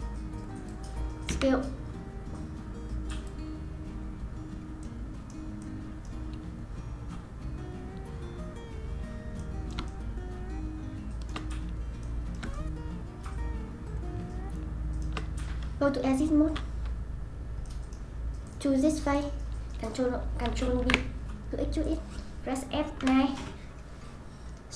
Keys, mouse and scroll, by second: 1.3 s, 3.8 scroll up 1, 4.1-4.8 scroll down 5, 4.8-11.5 middle drag, 11.5-12.0 scroll down 2, 12.0-15.8 middle drag, 15.8 Tab, 17.0-17.7 scroll down 4, 17.7 middle click, 18.5 click, 19.1 click, 20.8 ctrl+b, 23.0 F9.